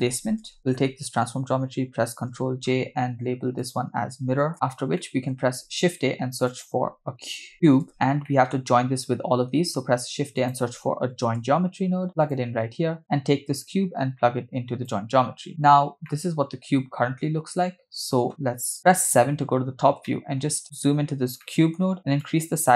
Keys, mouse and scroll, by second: 0.5 middle click, 2.5 ctrl+j, 3.6 click, 4.5 middle click, 4.5 scroll down 2, 5.0 middle click, 5.4 shift+a, 8.3 middle click, 9.7 shift+a, 13.0 click, 13.5-15.1 drag, 16.1-18.2 middle drag, 18.9 KP_7, 19.8 scroll down 2, 20.1-20.4 shift+middle drag, 20.6-20.9 scroll up 6, 21.5 middle click, 21.8 scroll up 2, 22.2-22.7 shift+drag.